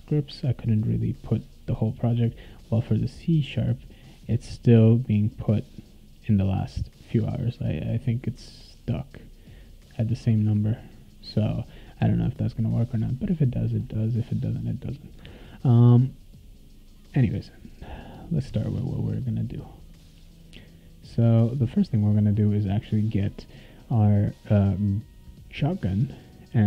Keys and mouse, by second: 2.6 click, 6.6 click, 7.6 click, 8.5 click, 9.9 click, 13.6 click, 18.3 click, 19.8 click, 20.5 click, 21.0 click, 25.5 click, 26.4 click.